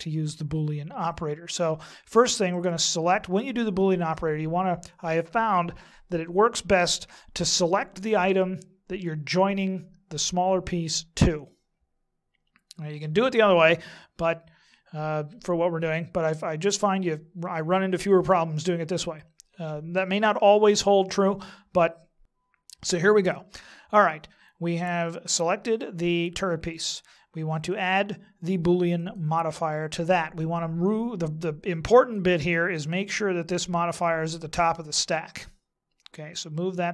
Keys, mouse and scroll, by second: 2.5 right click, 27.7 click, 31.9 click, 34.1 click.